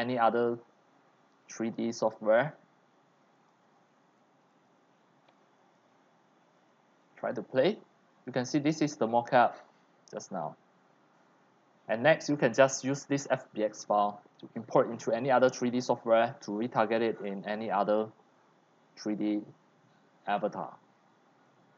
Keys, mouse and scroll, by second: 0.1 middle click, 0.9 scroll, 1.3-2.5 middle drag, 2.5 click, 3.3 middle click, 3.5 click, 4.4-7.1 drag, 7.1-8.7 scroll up 6, 7.5 right click, 7.7 middle click, 8.7 drag, 9.2 click, 9.9-10.5 drag, 11.1 click, 11.9 right click, 12.7-15.5 right drag, 15.5-17.1 drag, 17.6-18.6 drag, 19.2-21.3 drag.